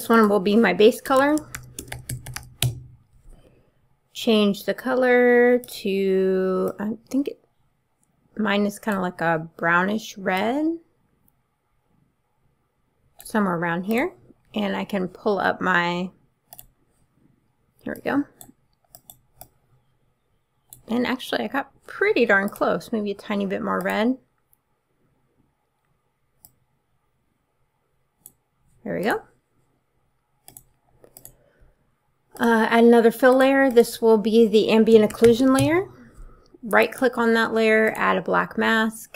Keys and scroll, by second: 0.8-2.9 typing, 34.9-35.7 typing.